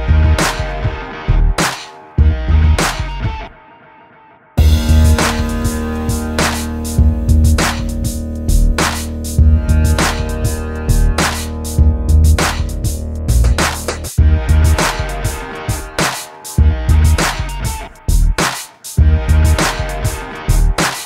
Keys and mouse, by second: 0.9 ctrl+KP_1, 1.7 s, 2.9 a, 4.5 alt+m, 5.1 alt+m, 5.7 alt+m, 6.3 alt+m, 6.9 alt+m, 7.8 KP_1, 9.8 alt+m, 10.5 alt+m, 11.5 alt+m, 12.2 alt+m, 13.3 middle click, 13.4 ctrl+KP_1, 14.1 middle click, 15.0 KP_7, 16.0 alt+s, 16.7 middle click, 17.1 middle click, 18.4 middle click, 19.9 alt+s, 20.6 alt+s.